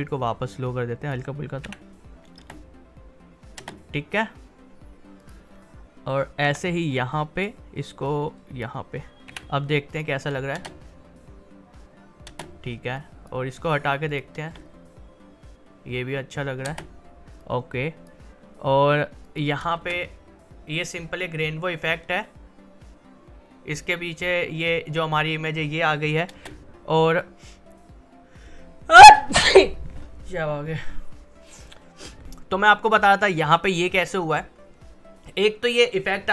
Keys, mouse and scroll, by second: 0.3-1.6 drag, 1.6 v, 2.4 space, 5.2 click, 6.4 r, 6.9-9.3 drag, 9.3 v, 9.9 click, 10.5 space, 12.9 click, 14.5 space, 16.6 space, 17.4-19.2 drag, 19.7 space, 26.3 space, 32.2-33.3 drag, 33.3 click, 33.3-36.3 drag.